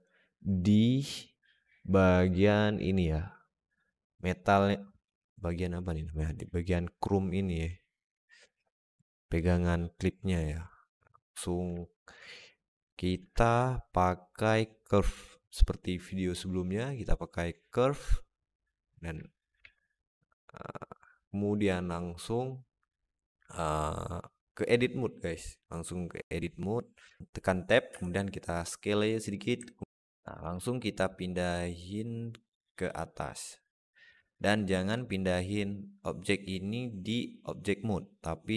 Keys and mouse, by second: 10.6-11.1 alt+middle drag, 11.6-12.0 alt+middle drag, 13.1 shift+a, 19.1 alt+middle drag, 19.4 alt+z, 19.8-21.5 alt+middle drag, 26.9 Tab, 27.7 s, 29.5 alt+middle click, 29.8 ctrl+z, 29.8 alt+middle click, 31.0-32.7 drag, 33.2 click, 34.2 alt+middle click.